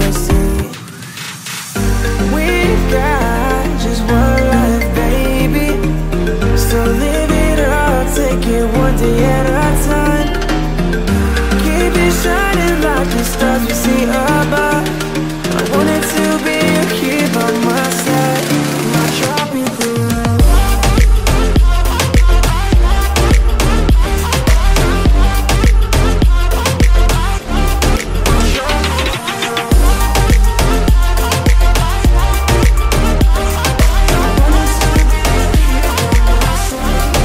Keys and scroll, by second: 4.0 Down, 7.9 ctrl+a, 8.2-10.9 typing, 11.1 Down, 11.3 Return, 35.7 space.